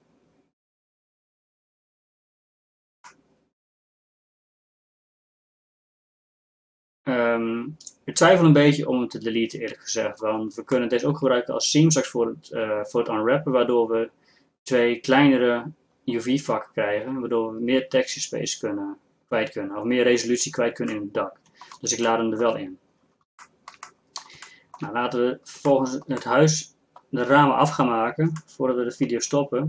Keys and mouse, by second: 3.1 middle click, 3.5 middle click, 6.8 middle click, 7.0 middle click, 10.4 middle click, 23.9 middle click, 25.0 middle click, 26.6-29.1 middle drag.